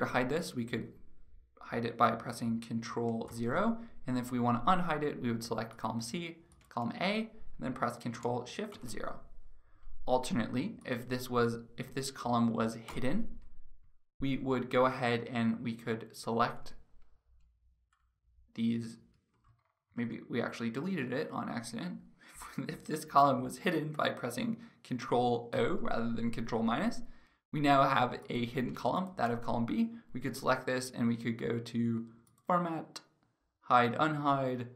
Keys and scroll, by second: 3.0 ctrl+0, 8.3 ctrl+shift+0, 12.4 ctrl+-, 19.5 ctrl+z, 25.1 ctrl+0.